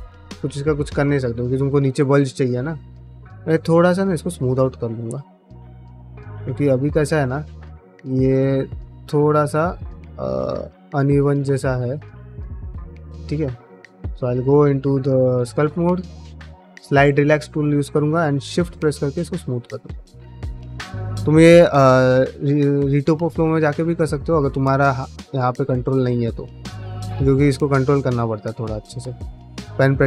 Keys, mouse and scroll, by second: 0.7 ctrl+alt+space, 1.2 shift+middle click, 3.2 ctrl+Tab, 3.7 shift+middle click, 4.0 middle click, 4.7-6.0 middle drag, 6.1 Tab, 6.5 middle click, 7.0 3, 7.3 middle click, 8.3 click, 8.8 shift+click, 9.5 shift+click, 10.2 shift+middle click, 10.9 shift+middle click, 11.7 g, 12.5 middle click, 14.1 ctrl+Tab, 17.0 click, 18.0-19.6 shift+drag, 19.8 middle click, 20.3 shift+click, 21.4 middle click, 21.7 shift+click, 22.0 shift+click, 22.2 shift+click, 22.4 shift+click, 22.9 shift+click, 23.6 shift+click, 23.8 shift+click, 24.2 middle click, 24.5 shift+click, 24.8 shift+click, 25.0 middle click, 25.3 shift+click, 26.2 middle click, 26.4 shift+click, 27.1 shift+click, 27.3 middle click, 27.5 shift+click, 27.9 shift+click, 28.3 middle click, 28.7 shift+click, 29.1 middle click, 29.5 shift+click.